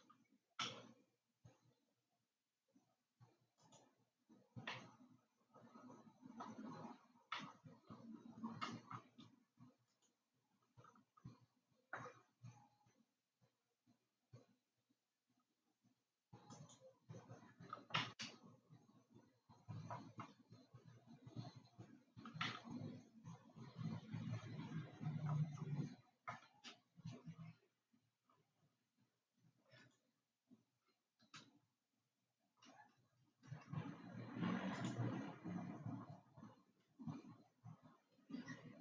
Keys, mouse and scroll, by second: 1.1 e, 5.2-10.6 middle drag, 10.6 click, 11.6 e, 18.8-21.4 middle drag, 21.4-22.7 scroll up 3, 23.1-26.3 shift+middle drag, 30.3 click, 35.3 alt+click.